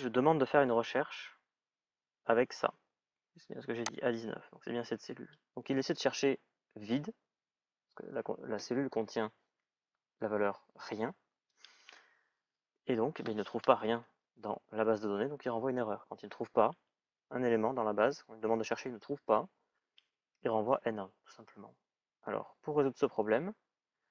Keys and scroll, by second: 13.4 Return.